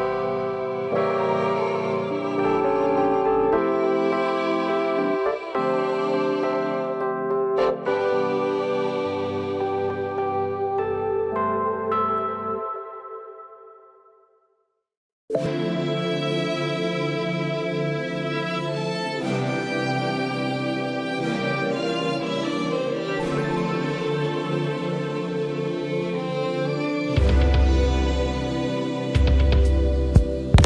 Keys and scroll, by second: 11.7 g, 26.7 space.